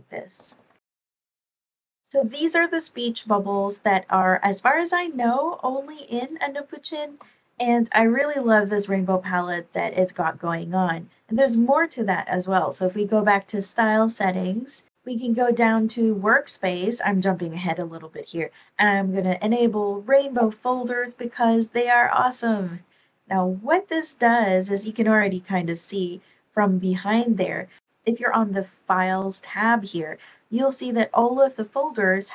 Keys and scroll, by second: 0.3 Left, 0.5-2.1 typing, 0.9 super+Right, 1.1 Return, 7.0 BackSpace.